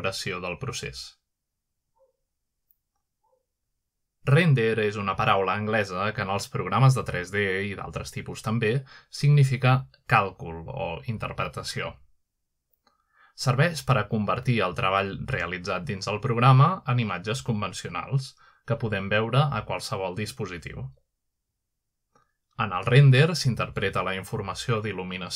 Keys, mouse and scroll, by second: 1.0-2.2 drag, 2.7 KP_Add, 4.1 click, 7.5-7.8 scroll up 1, 7.8-8.8 scroll down 1, 8.4-11.2 shift+middle drag, 13.5-14.7 middle drag, 15.3 shift+middle click, 16.3-17.0 middle drag, 17.4-18.2 middle drag, 18.3-19.2 drag, 21.2-22.0 middle drag, 22.0 r, 23.1 x, 23.5 x.